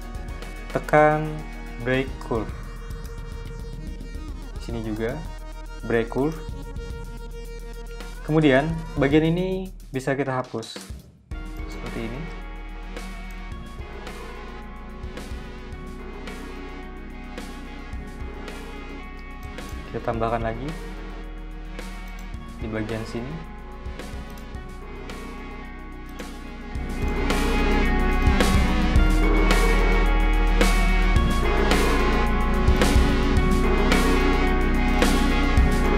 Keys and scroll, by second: 10.0 v, 14.3 BackSpace, 18.2-19.4 typing, 22.3 a, 27.7 v, 29.1 BackSpace, 31.3-32.5 typing.